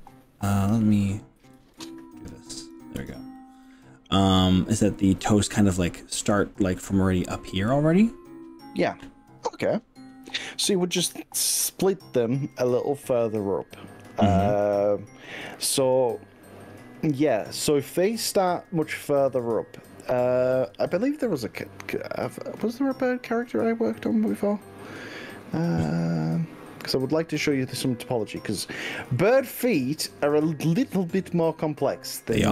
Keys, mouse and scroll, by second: 2.6 click, 3.4-4.7 middle drag, 5.1-5.7 middle drag, 8.9-15.5 middle drag, 18.7-23.1 middle drag, 23.5 scroll up 2, 23.9 scroll down 2, 24.4-29.5 shift+middle drag.